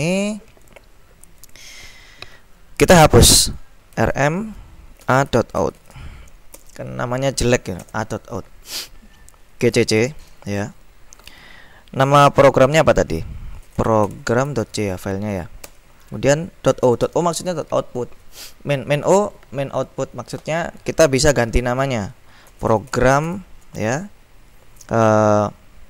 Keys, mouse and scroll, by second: 0.2 ctrl+b, 0.7 click, 1.7 click, 4.0-6.5 typing, 6.7 Return, 8.0 ctrl+l, 9.5-10.4 typing, 13.5-17.3 typing, 22.3-23.9 typing.